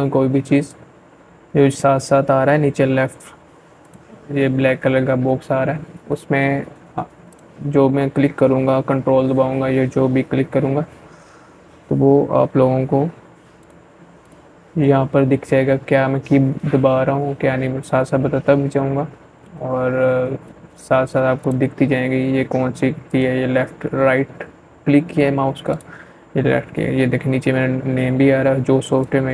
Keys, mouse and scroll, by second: 1.6 click, 1.7 click, 5.1 click, 6.8 c, 11.4 click, 19.2 click, 20.9 right click, 23.5 click, 26.8 right click.